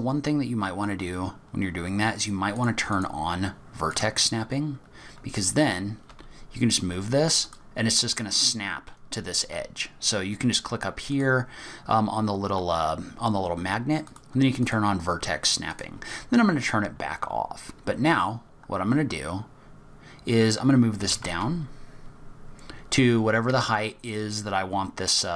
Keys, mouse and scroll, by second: 0.0-0.4 scroll down 2, 0.4-0.9 scroll up 1, 0.9-1.5 scroll up 1, 2.5 click, 2.9 click, 4.9-6.0 scroll up 6, 6.0 scroll up 1, 6.1 g, 7.8-8.4 scroll up 3, 11.1 click, 14.1 click, 15.7 click, 16.1-17.7 scroll down 10, 17.7-18.1 scroll down 6, 18.1-18.7 scroll up 3, 18.7 scroll down 2, 18.9-19.3 scroll up 2, 21.0 g.